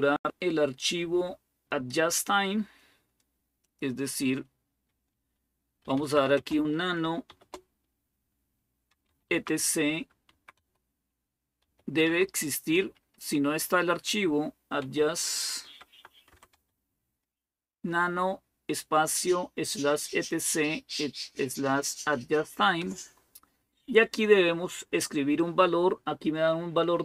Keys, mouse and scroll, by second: 3.4-5.6 drag, 5.4-7.1 typing, 8.5-11.4 typing, 14.4-16.8 typing, 22.6 Return.